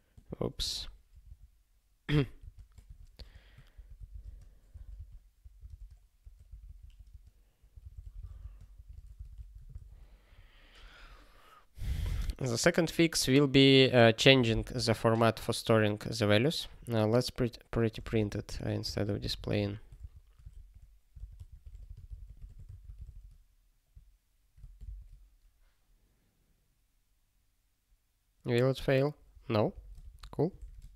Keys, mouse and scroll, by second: 0.2 я, 0.7 space, 1.1 BackSpace, 2.4 super+space, 2.8-8.8 typing, 9.8 ctrl+s, 17.5 click, 18.1 alt+>, 18.9-20.1 typing, 20.6 alt+f, 21.2 alt+b, 21.3-22.1 typing, 23.1 ctrl+s, 29.7 super+o, 30.0 alt+>.